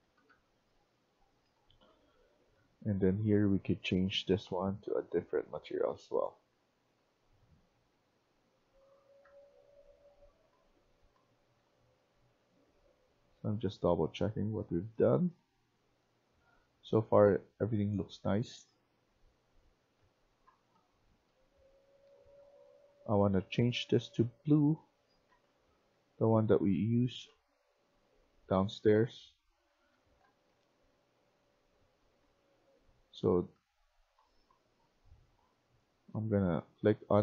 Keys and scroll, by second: 0.0-22.5 typing, 24.4-34.4 typing, 36.3-37.2 typing.